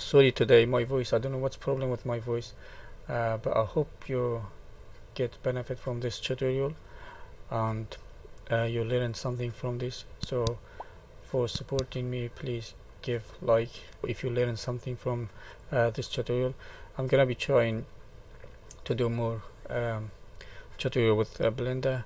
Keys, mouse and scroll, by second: 1.9 middle click, 3.3 middle click, 4.8 middle click, 8.9 click, 10.2 click, 11.5 middle click, 12.8 middle click, 14.0 shift+middle click, 14.0-14.5 scroll up 1, 15.6 click, 17.2 middle click.